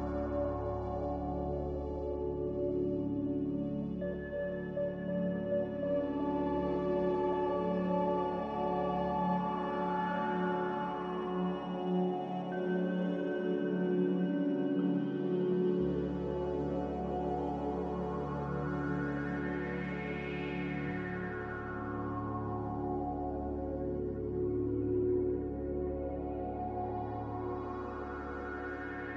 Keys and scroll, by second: 1.2 a, 3.9 ctrl+c, 8.7 ctrl+c, 11.8 ctrl+v, 13.0 ctrl+c, 16.7-17.0 typing, 17.7 Return, 21.8 ctrl+z, 24.9 ctrl+c, 27.6 typing.